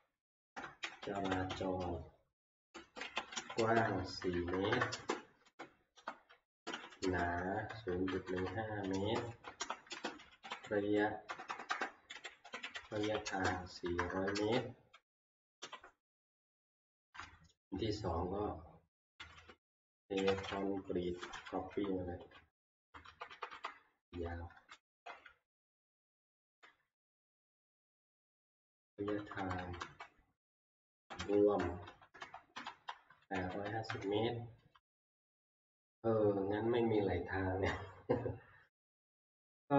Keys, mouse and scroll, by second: 0.0-2.0 typing, 3.1-15.9 typing, 20.0-22.7 typing, 21.7 Left, 24.7 ctrl+c, 25.8 F2, 25.8 Left, 26.4 ctrl+v, 27.9 Left, 28.9 Left, 29.2 Left, 29.3 Tab, 29.4 Left, 29.6 Left, 29.8 Left, 30.5-31.7 typing, 31.8 Right, 32.2 Right, 32.5 Right, 33.0-33.7 typing, 34.0 Tab, 34.8 Left, 34.9 Tab, 34.9 i.